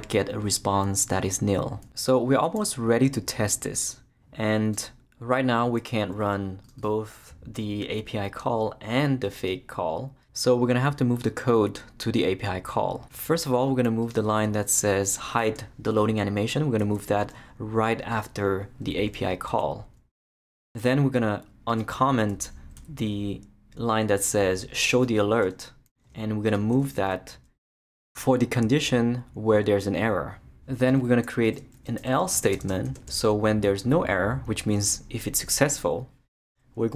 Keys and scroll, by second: 16.8 super+x, 19.0 Return, 19.5 super+v, 20.3 Return, 22.8 super+/, 25.4 BackSpace, 26.1 shift+BackSpace, 27.0 shift+super+x, 27.8 super+x, 29.8 Return, 30.2 super+v, 31.5-32.9 typing, 33.1 shift+Return, 34.0 Return.